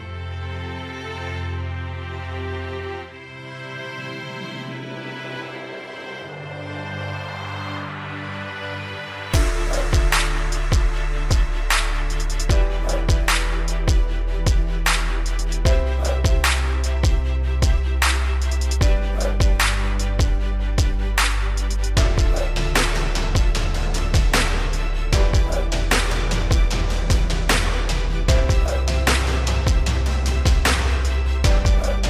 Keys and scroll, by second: 1.2 v, 3.1 p, 7.7 v, 10.4 p, 19.4 v, 30.1 Delete.